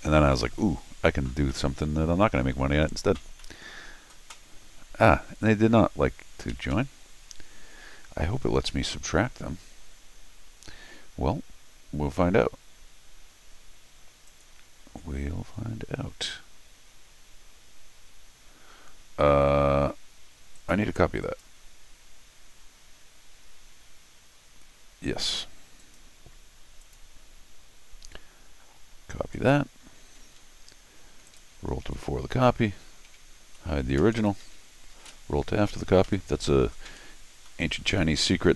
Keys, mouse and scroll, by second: 0.3 middle click, 1.5 middle click, 3.4 middle click, 6.5 Escape, 6.7 Escape, 14.3 click, 20.6 click, 21.2 click, 25.8 click, 26.8 click, 30.5 Escape, 31.3 click, 31.8 ctrl+alt+r, 32.8 Escape, 33.4 Tab, 34.2 click, 34.7 ctrl+alt+shift+r, 36.1 Escape, 37.5 middle click, 38.0 middle click, 38.5 scroll up 1.